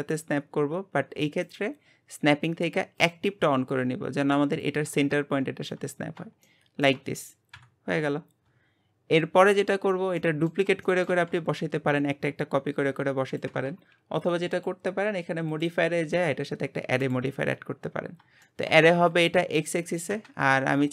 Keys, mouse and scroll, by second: 1.4-4.5 drag, 4.6 click, 6.0-6.4 scroll up 1, 6.4-7.5 shift+middle drag, 7.5 KP_1, 9.5 click, 10.2-14.0 middle drag, 14.5 click, 17.2 click, 18.0-18.4 scroll up 3, 18.4-20.9 shift+middle drag.